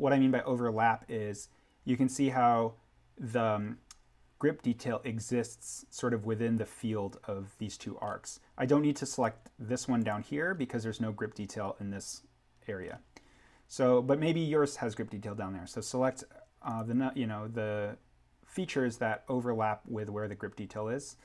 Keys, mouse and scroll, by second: 8.0-8.9 scroll up 1, 9.0 click, 15.2 scroll down 1, 16.6 click.